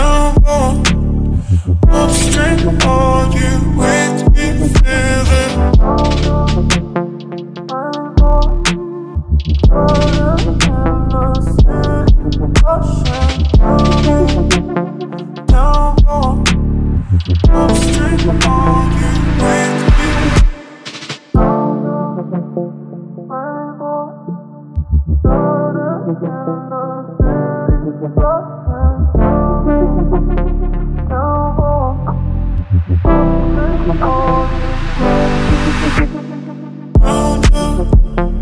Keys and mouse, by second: 0.4-3.3 drag, 4.3-5.9 drag, 6.2 click, 7.9-8.7 drag, 13.5-15.1 middle drag, 15.7 ctrl+middle click, 16.1 middle click, 16.5 click, 16.8 shift+d, 17.4 click, 17.7 ctrl+middle click, 19.1 click, 22.6 click, 23.0 middle click, 23.4 click, 24.8 click, 26.3-30.5 drag, 31.0 click, 32.2 click, 33.2 click, 35.5 click, 35.6-36.2 drag, 38.1 shift+middle drag.